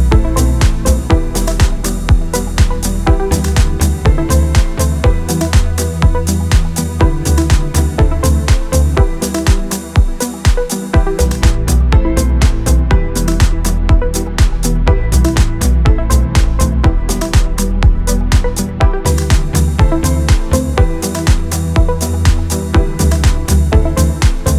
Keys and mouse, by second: 0.1 click, 1.5 shift+middle click, 1.7-3.1 typing, 2.1 shift+middle click, 2.4 middle click, 2.8 shift+middle click, 3.2 shift+middle click, 4.8-6.1 drag, 7.8-9.8 drag, 9.9 click, 12.3 Tab, 14.2 click, 14.6 Tab, 15.5 middle click, 15.7 middle click, 15.9 KP_1, 16.8 Tab, 17.3 click, 17.8 middle click, 18.8 middle click, 19.1 middle click, 19.6 middle click, 19.7 middle click, 20.5 middle click, 21.0 middle click, 21.2 middle click, 21.3 middle click, 22.2 middle click, 22.4 click, 22.5 click, 22.7 middle click, 23.2 middle click, 23.4 middle click, 23.6 click.